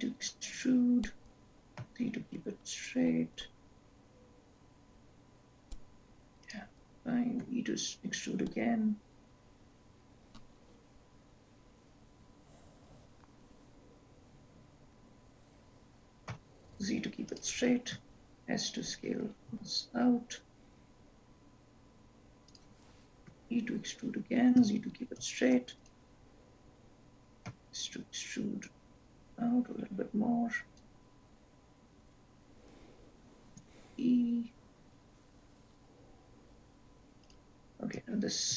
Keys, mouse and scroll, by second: 7.6 e, 18.3 s, 23.4 e, 27.6 s, 33.7 e, 38.3 ctrl+z.